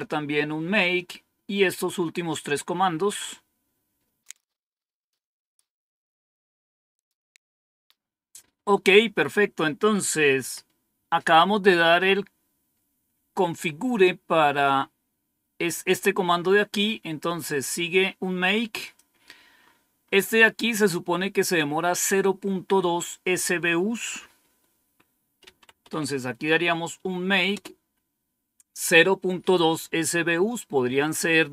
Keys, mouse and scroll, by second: 10.3 Up, 11.8 Down, 13.9-16.2 scroll up 1, 16.2-17.5 scroll down 1, 18.7 click, 19.7-21.2 scroll up 1, 23.8 click, 24.5 click, 25.1-26.4 typing, 27.4 Return.